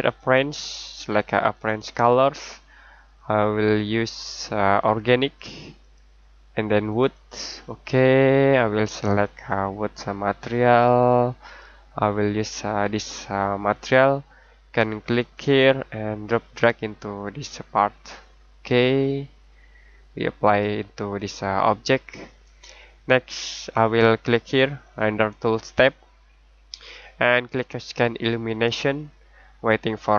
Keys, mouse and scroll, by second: 0.0 click, 15.3 click, 19.0 middle click, 20.7-21.2 scroll down 1, 21.2-21.6 scroll up 1, 21.6-23.7 scroll down 1, 25.7 click.